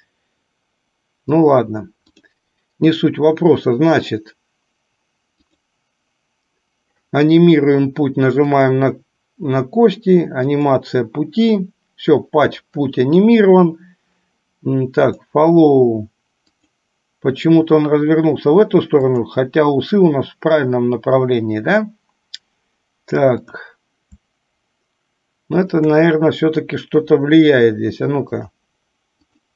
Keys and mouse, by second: 2.3 click, 5.7 click, 8.6 click, 10.6 click, 16.6 click, 19.2 click, 25.8 shift+click, 28.7 click.